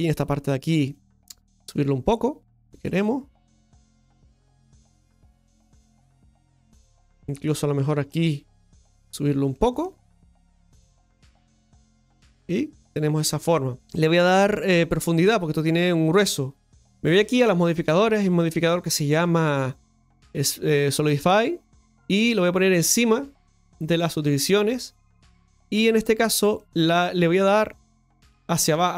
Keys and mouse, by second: 0.9 right click, 1.3 shift+right click, 2.0 click, 3.7 right click, 4.2 shift+right click, 5.2 click, 6.9 Tab, 7.1 middle click, 7.8 Tab, 8.7 right click, 9.1 right click, 9.4 middle click, 10.6 click, 11.5 Tab, 11.8-13.7 middle drag, 23.0 click, 26.5-27.9 middle drag.